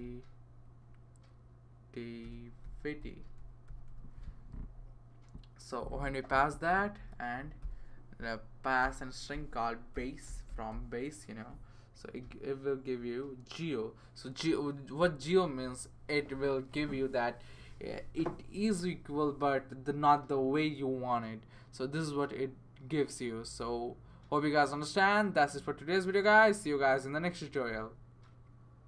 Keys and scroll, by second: 0.0-0.5 typing, 2.0-4.3 typing, 6.9 :, 7.6 b, 8.8-11.2 typing.